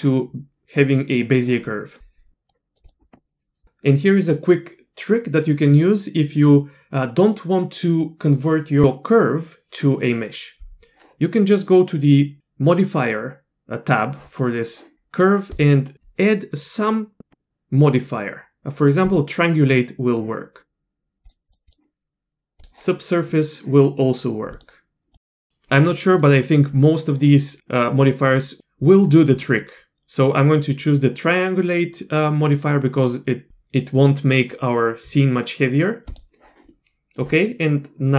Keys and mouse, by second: 1.8 middle click, 2.5 click, 15.5-19.1 drag, 21.2 click, 21.7-22.6 drag, 24.5 click, 25.1-25.5 drag, 26.1-36.2 drag, 36.7 middle click.